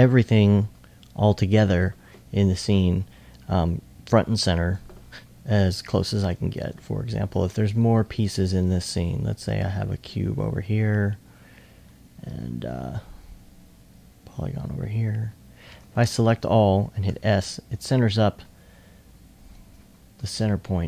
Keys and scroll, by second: 6.0 typing, 7.3-8.1 typing, 10.1 e, 17.1 s.